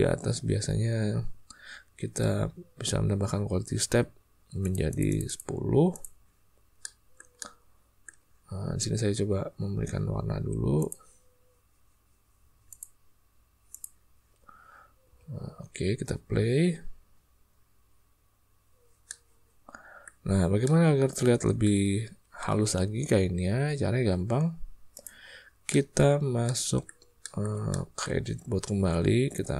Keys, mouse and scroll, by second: 4.6 click, 4.8 click, 5.0 click, 5.9 click, 6.8-8.0 middle drag, 10.7 drag, 12.6-13.9 drag, 15.0 space, 19.2 middle click, 19.9 click, 20.2 middle click, 20.8-21.9 shift+middle drag, 21.2 shift+click, 23.6 space, 24.9 drag, 25.7 middle click, 25.9 click, 26.4 ctrl+click, 27.2 ctrl+click, 27.6-28.0 shift+drag, 28.8 Tab.